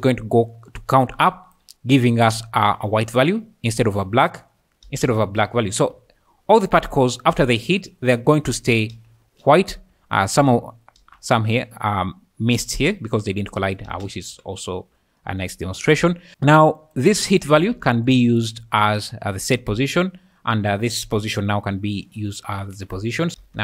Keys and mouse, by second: 0.0-9.6 typing, 10.9 space, 13.9 space, 16.8 click, 17.3 click, 17.6 shift+d, 18.1 click, 20.7 click, 23.4 space.